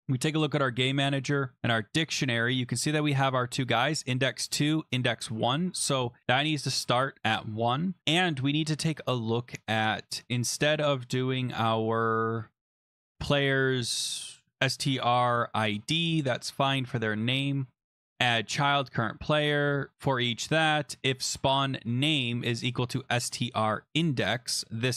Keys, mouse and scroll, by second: 0.0 click, 0.9 click, 1.6 click, 2.5 click, 2.9 click, 4.6 click, 5.5-6.1 scroll down 1, 6.2 click, 6.6 BackSpace, 9.1 scroll, 12.9 click, 20.3 click, 21.9 click, 22.0 click, 22.7 click, 22.8 click.